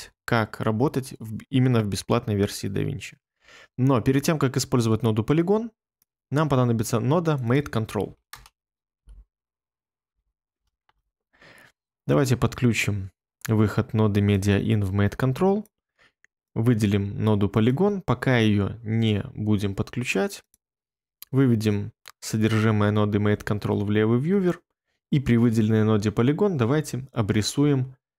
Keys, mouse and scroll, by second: 8.3-10.0 typing, 10.8 Return, 23.3 1.